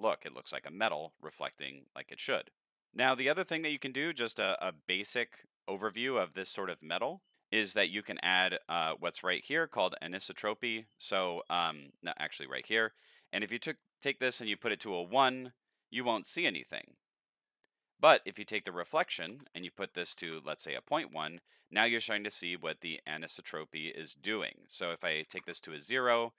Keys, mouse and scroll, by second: 1.3-2.8 middle drag, 10.7 click, 11.3 drag, 12.9 click, 18.4 click, 19.3 KP_Decimal, 20.0 KP_1, 20.2 KP_Enter, 24.6 click.